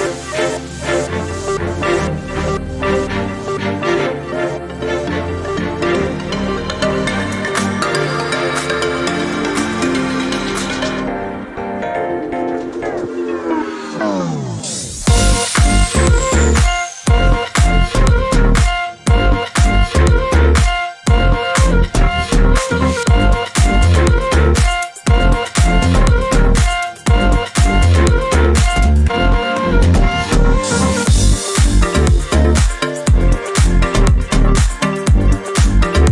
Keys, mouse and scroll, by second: 0.2 ctrl+space, 1.1 ctrl+click, 2.1 click, 3.3 click, 4.3 shift+click, 6.5 click, 7.5 click, 8.6 Up, 11.9 click, 13.0 click, 13.9 Up, 18.0 click, 18.6 click, 19.3-21.1 drag, 21.4 KP_5, 22.4 click, 24.8 click, 25.7 click, 27.1 Right, 32.4 click, 33.8 5, 35.0 click.